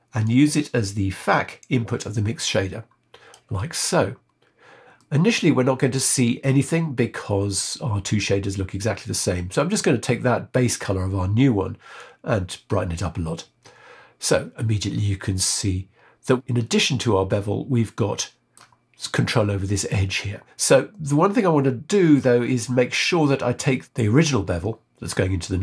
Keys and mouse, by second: 0.2-3.4 drag, 4.9-6.5 middle drag, 9.5 click, 17.3-18.6 middle drag, 20.5-22.1 middle drag, 23.6 click.